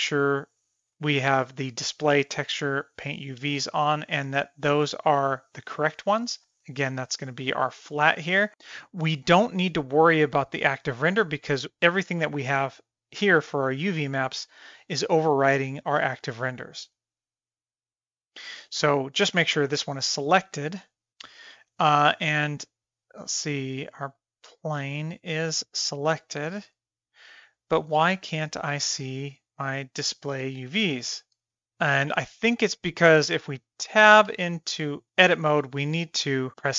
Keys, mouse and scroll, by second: 4.2 click, 11.3 click, 11.7 click, 13.0 click, 13.9-14.4 middle drag, 15.4 click, 16.8 click, 24.7 click, 28.4-29.7 drag, 30.4-31.4 drag, 34.3 Tab.